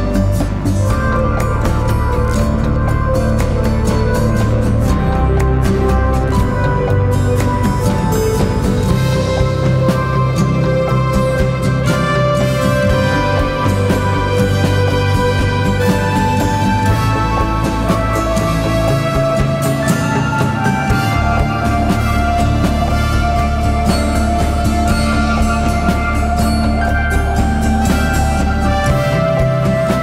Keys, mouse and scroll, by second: 17.8 ctrl+click.